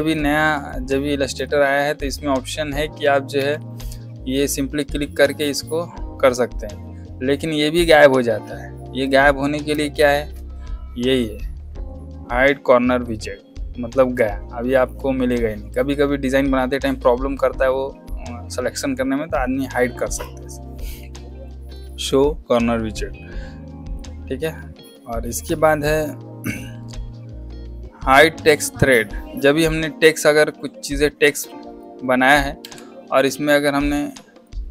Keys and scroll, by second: 3.3 v, 9.6 space, 32.5 Escape.